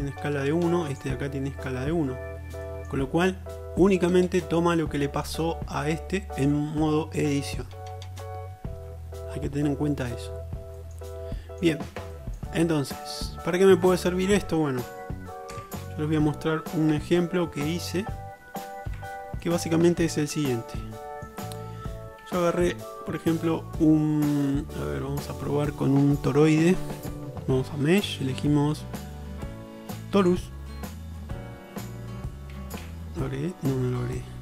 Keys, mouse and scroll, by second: 3.5-5.4 middle drag, 9.9-14.1 middle drag, 15.6 Tab, 17.0 Tab, 19.0 Delete, 20.2-20.6 shift+middle drag, 22.5 shift+a, 24.5 click, 31.7-33.0 drag, 32.9 shift+a.